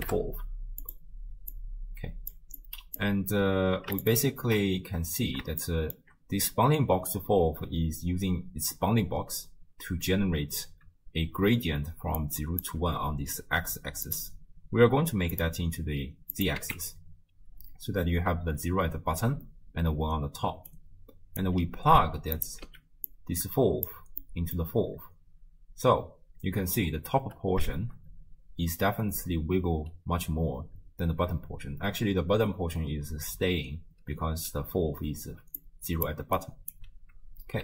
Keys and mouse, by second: 1.5-2.3 drag, 2.6 click, 5.8 shift+click, 12.2-15.4 drag, 12.2 d, 12.6 d, 14.1 d, 16.3 click, 20.5 d, 20.7 click, 21.4 d, 22.4 click, 22.4 d, 22.7 x, 23.1-23.9 drag, 24.2 middle click, 25.3 space, 27.2 space, 27.9 shift+space, 29.4 space, 30.8 space, 32.0 space, 35.4-36.4 d, 35.6 click, 36.4 right click, 36.8 d.